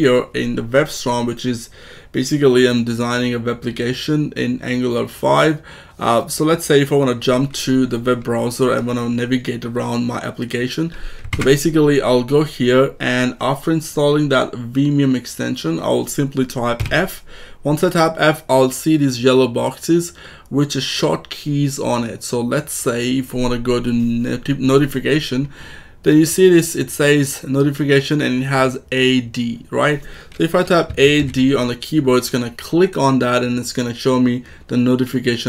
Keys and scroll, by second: 11.3 alt+Tab, 16.7 f, 30.8 a, 31.1 d.